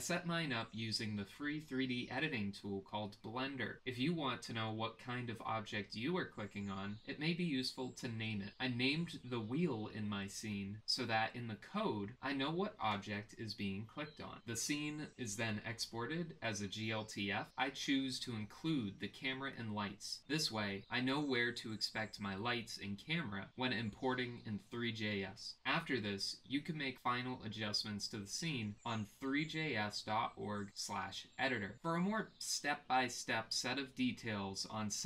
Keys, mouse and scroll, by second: 0.0 g, 0.9 middle click, 1.0 click, 1.1 middle click, 1.3 g, 6.3 click, 7.0 click, 7.6-11.4 drag, 9.3 e, 14.1-15.7 drag.